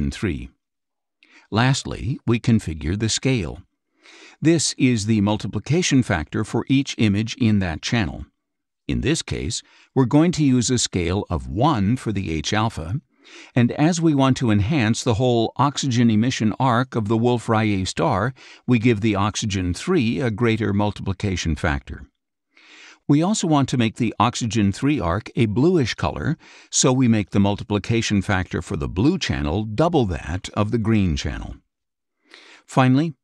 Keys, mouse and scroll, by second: 0.0 KP_3, 1.6 click, 2.6 KP_3, 3.2 Tab, 6.3 click, 8.6 KP_1, 12.6-13.6 drag, 22.6 2, 25.5-26.7 drag, 29.8 4, 31.8 click.